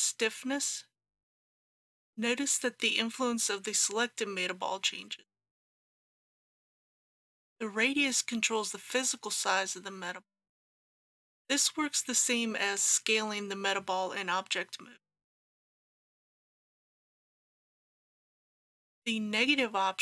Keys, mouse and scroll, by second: 6.9-7.4 scroll down 1, 15.3-20.0 drag.